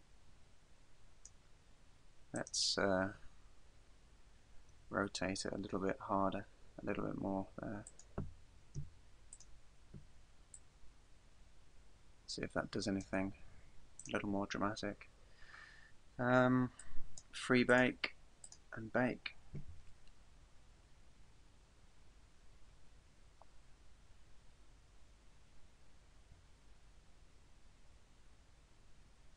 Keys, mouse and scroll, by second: 2.4 right click, 4.8 r, 8.0 click, 8.8 i, 10.6 click, 14.0 right click, 16.8 click, 17.7 click, 18.5 click.